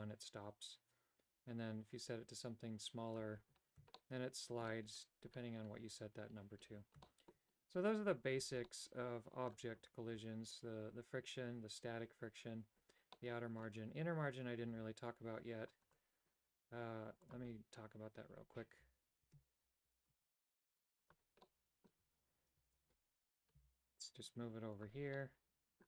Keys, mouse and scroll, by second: 4.1 shift+middle click, 7.2 shift+middle click, 8.8 middle click, 13.3 middle click, 16.0-17.0 right drag, 17.4 click, 19.4 alt+g, 20.0 g, 21.6 middle click, 22.7 KP_7, 23.8 g, 25.3 middle click.